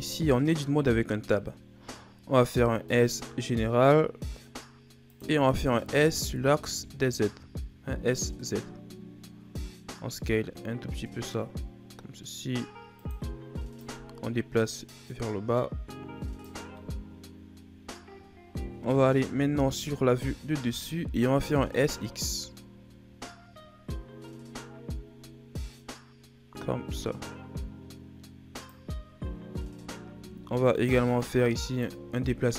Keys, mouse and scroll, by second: 1.0-2.4 ctrl+scroll up 2, 2.4 s, 13.7 click, 16.7-19.0 middle drag, 19.0 KP_7, 20.1-21.4 shift+scroll up 7, 21.4 s, 29.7-30.0 shift+scroll up 3, 30.0 z, 30.7 right click, 30.9 b.